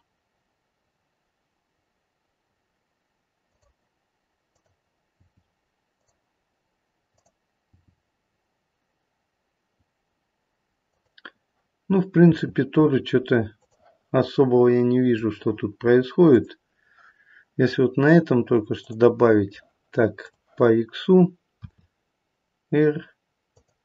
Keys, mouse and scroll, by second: 4.5 click, 5.1 g, 7.1 click, 7.7 g, 12.2 r, 14.2 middle click, 16.2 click, 18.7 click, 20.2 click, 21.6 r.